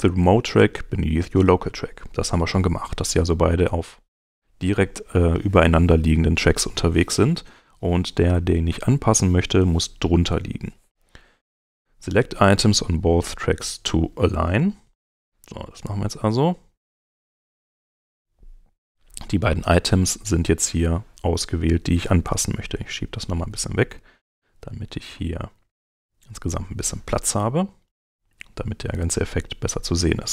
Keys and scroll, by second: 27.4 alt+Home.